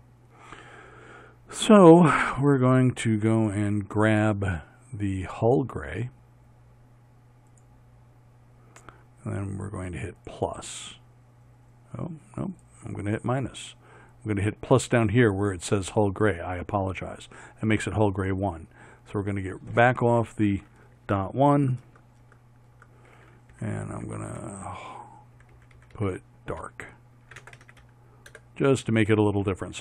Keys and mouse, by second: 22.0 BackSpace, 23.8 Left, 24.3 Left, 25.7 Left, 26.0 Left.